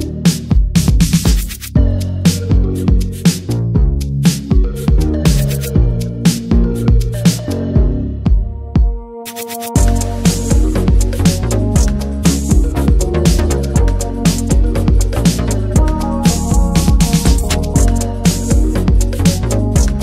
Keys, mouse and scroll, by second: 0.0-1.7 middle drag, 1.7-4.2 drag, 4.2 shift+middle click, 4.8 click, 5.4 middle click, 5.6-6.0 scroll up 1, 6.0 click, 6.6 click, 7.8-10.3 middle drag, 10.3-10.6 scroll down 3, 10.6 click, 10.7 scroll up 5, 10.9-12.6 middle drag, 12.6 scroll up 2, 12.8-13.5 middle drag, 13.5 scroll down 2, 13.7-14.3 middle drag, 14.3 click, 17.7-18.1 scroll down 1, 18.1 click, 18.6 shift+middle click, 18.8-19.2 scroll up 3, 19.4 click, 19.9 click.